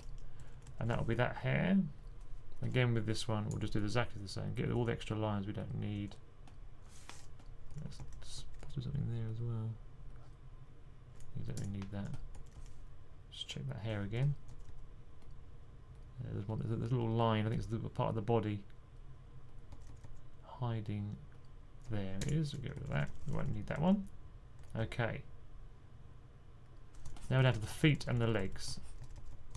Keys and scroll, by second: 0.0-0.6 typing, 7.3-8.5 typing, 11.9-12.7 typing, 14.5 typing, 19.3-20.1 typing, 22.6-24.6 typing, 27.0-29.5 typing.